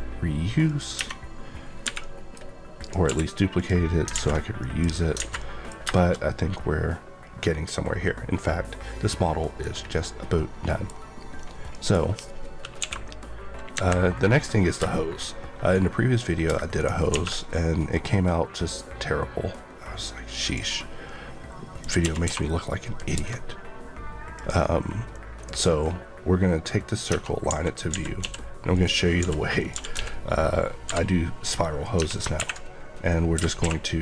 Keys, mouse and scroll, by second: 12.3 click, 12.7 KP_1, 14.1 KP_3, 14.3 scroll down 1, 14.8 middle click, 15.2 scroll up 1, 16.7 right click, 17.0 a, 17.8 click, 21.7 click, 22.0 typing, 23.1 KP_Enter, 24.3 click, 26.6-27.0 scroll up 1, 27.0 Tab, 27.4-28.1 typing, 33.3 Escape, 33.6 q.